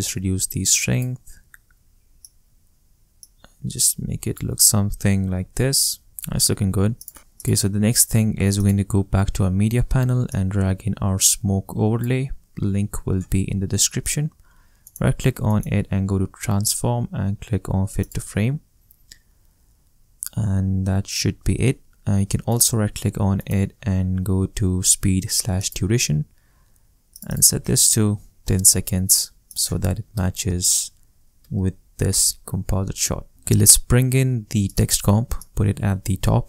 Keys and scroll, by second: 28.1 i, 28.4 0, 30.1 BackSpace, 30.4 0, 31.4 Return.